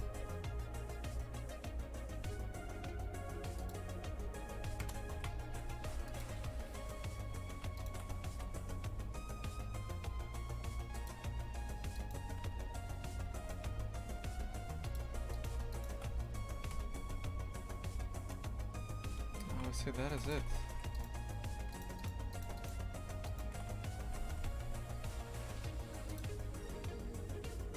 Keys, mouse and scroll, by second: 4.8 KP_0, 5.1 shift+f, 7.8 shift+right click, 8.4 g, 12.0 right click, 12.4 e, 15.3 right click, 16.1 f, 16.7 KP_0, 17.1 Tab, 19.1 KP_0, 19.5 shift+f, 20.4 Tab, 20.7 3, 20.9 right click, 21.7 shift+right click, 22.0 shift+right click, 22.3 shift+right click, 22.6-24.1 shift+right drag, 24.1 g.